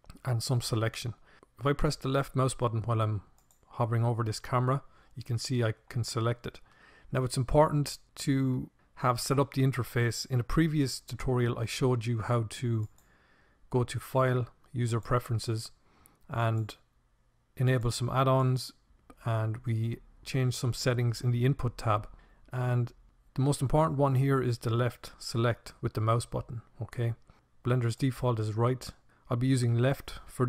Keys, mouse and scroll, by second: 1.3-7.3 drag, 10.9-13.1 drag.